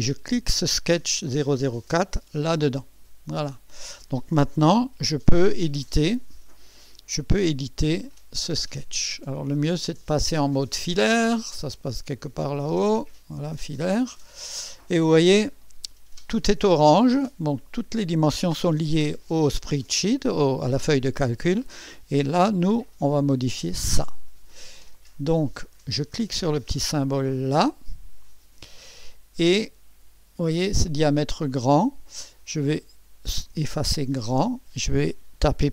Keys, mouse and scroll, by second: 0.3-2.2 drag, 7.8 click, 9.0-9.6 scroll up 2, 9.6-10.6 right drag, 11.7 click, 13.4 click, 14.2 scroll up 2, 14.8 right click, 23.8 click, 24.8 click, 28.2 click, 31.5 click, 33.3-34.3 typing.